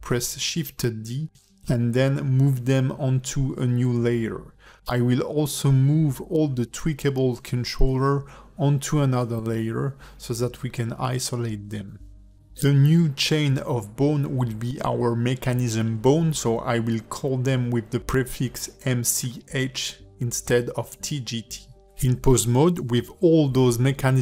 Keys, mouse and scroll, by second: 0.0 scroll down 4, 0.1 shift+middle click, 0.4 shift+click, 1.1 shift+click, 2.8 click, 3.2 click, 3.4 click, 4.9 click, 5.2 click, 5.4 click, 6.8 click, 7.2 click, 7.4 click, 9.6 click, 10.8 click, 11.4 click, 11.7 click, 12.0 click, 12.2 click, 13.9 click, 16.4 shift+click, 17.1 shift+click, 17.9 shift+click, 18.8 shift+click, 19.7 ctrl+F2.